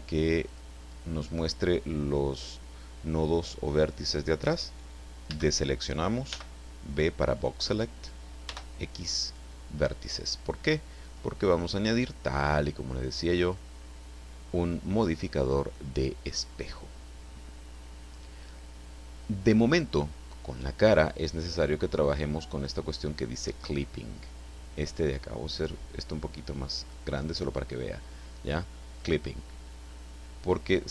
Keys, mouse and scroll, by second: 0.5 click, 5.3 a, 6.3 b, 6.9 click, 8.4 x, 9.3 click, 11.0 click, 11.7 click, 13.4 click, 22.5 click, 25.7-27.1 drag.